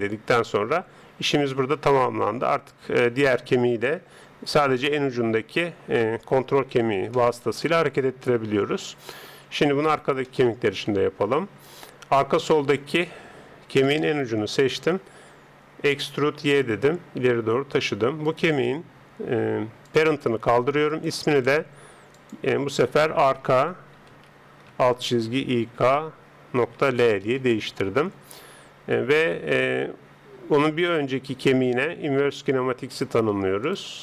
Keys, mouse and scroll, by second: 2.4 right click, 4.0 g, 6.7-9.9 middle drag, 9.9 right click, 11.0 Tab, 14.1 right click, 15.9 e, 18.2 right click, 19.8-24.0 drag, 29.0 Tab, 30.6 right click, 33.0-34.0 drag.